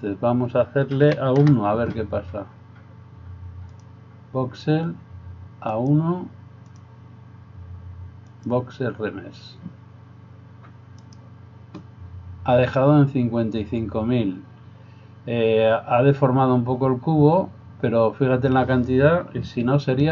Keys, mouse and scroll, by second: 5.9-7.5 drag, 8.4-20.1 drag, 11.0 right click.